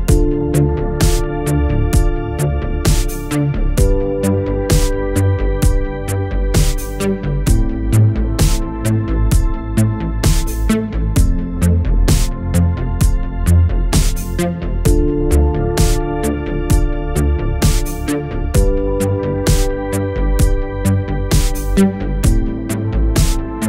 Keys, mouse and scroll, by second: 2.4-3.3 alt+click, 8.5 click, 10.4 ctrl+Num_Lock, 10.6 ctrl+d, 11.2 click, 17.9 Return, 21.8 click, 23.3-23.6 alt+click.